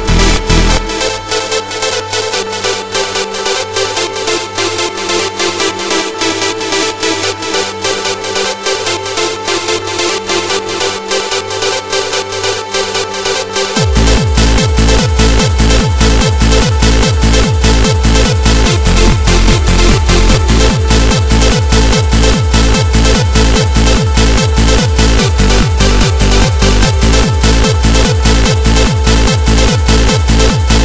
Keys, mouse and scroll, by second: 5.3 n, 8.3 click, 8.7 click, 15.1 KP_7, 15.8-16.3 scroll down 7, 17.4 right click, 18.5 click, 19.4 click, 22.4 r, 24.6 click, 25.6 g, 27.9 click, 29.0 KP_1, 30.6 g.